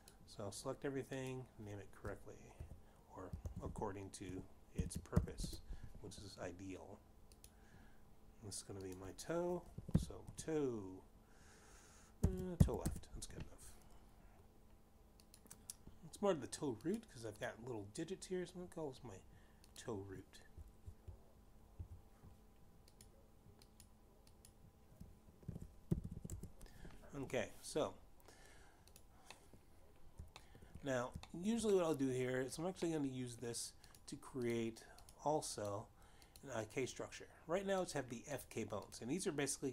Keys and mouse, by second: 1.0 click, 3.0-5.9 typing, 6.2 Return, 8.4 click, 9.8 t, 10.8 o, 11.1 e, 12.1 ., 13.5 shift+l, 13.7 Return, 16.1 click, 17.7 click, 17.9 click, 20.6 click, 21.4 Left, 22.1 Right, 23.9 click, 24.6 click, 25.2 click, 26.3 shift+r, 26.7 o, 26.9 o, 27.1 t, 27.3 Return, 29.8 click, 30.4 middle click, 31.4 shift+middle click, 32.3 shift+middle click, 32.7 middle click, 33.9 middle click, 35.0 click, 35.5 click, 36.1 click, 36.7 click, 37.3 click, 38.9 click, 39.4 click.